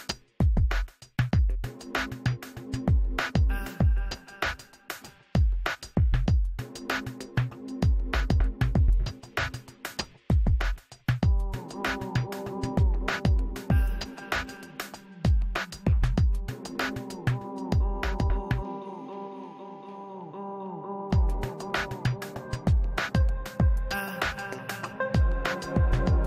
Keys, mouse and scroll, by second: 3.0 click, 4.2 middle click, 4.4-6.7 drag, 4.8 ctrl+z, 6.8 click, 7.2 ctrl+z, 7.4 f, 7.5-8.7 middle drag, 8.1 f, 8.4-10.4 drag, 9.9-11.9 middle drag, 10.5 f, 11.1 i, 11.3 f, 11.5 f, 11.7-14.6 drag, 14.6 middle click, 14.6 f, 14.8 f, 14.9-16.7 drag, 15.2 middle click, 17.0-26.2 drag, 17.3-21.1 middle drag, 21.4-26.2 middle drag.